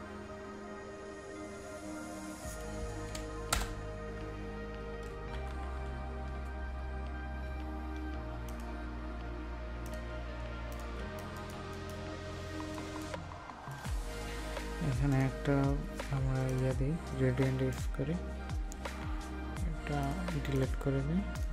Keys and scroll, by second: 10.9 ctrl+space.